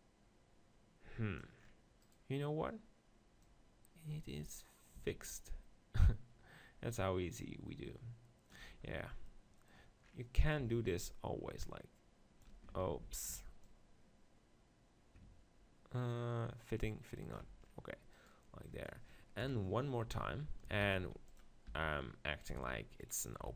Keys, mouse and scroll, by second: 1.6 middle click, 2.0-3.9 right drag, 3.4-5.3 drag, 3.5 middle click, 8.8-9.8 middle drag, 11.1-12.9 drag, 12.9 ctrl+z, 13.6-15.5 drag, 17.6 middle click, 18.2-19.4 right drag, 18.7 click, 19.4-23.4 typing, 19.8 right click, 20.1-22.5 middle drag, 22.5-23.5 drag.